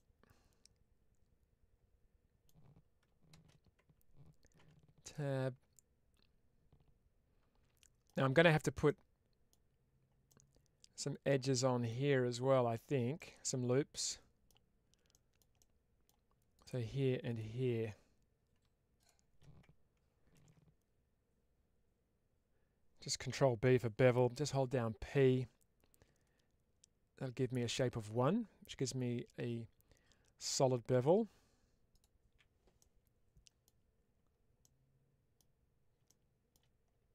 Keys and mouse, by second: 3.2 shift+space, 5.0-9.4 middle drag, 10.1-11.7 middle drag, 13.0-14.3 middle drag, 15.0 middle click, 15.4 middle click, 16.4 click, 31.8 click, 32.1 p, 32.6 middle click, 32.6 p, 34.5 middle click.